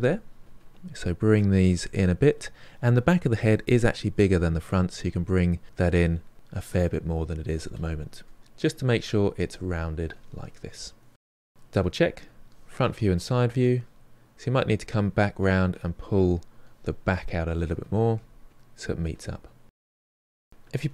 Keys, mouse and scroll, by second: 0.5-6.0 drag, 6.0-7.5 middle drag, 7.5 click, 8.1-9.1 middle drag, 9.1 click, 9.6-11.6 middle drag, 11.6 KP_1, 12.4 middle click, 13.0-14.1 drag, 14.1 KP_3, 14.4 KP_1, 15.0 click, 15.9-17.6 middle drag, 17.6-19.9 drag, 19.9-20.9 middle drag.